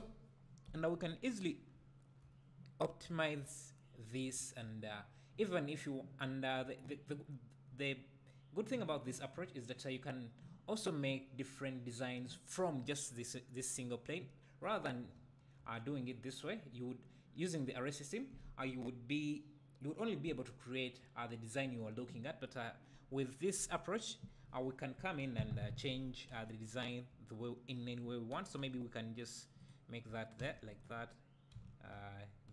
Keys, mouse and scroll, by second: 0.8 click, 1.7 `, 9.7-13.3 drag, 13.3-14.6 scroll down 1, 14.6 scroll up 1, 16.7-20.1 scroll down 1, 21.2-22.3 scroll down 2, 22.3-23.7 scroll down 1, 23.7 click, 25.2 KP_7, 26.3 g, 26.9 click, 28.6 g, 29.6 click, 30.4 shift+d, 30.8 right click.